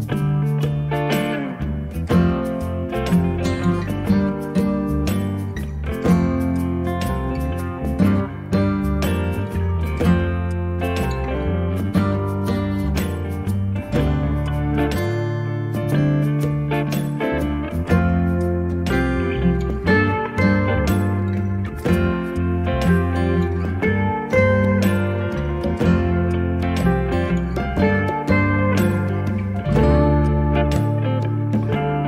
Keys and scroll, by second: 3.5 space, 5.3 m.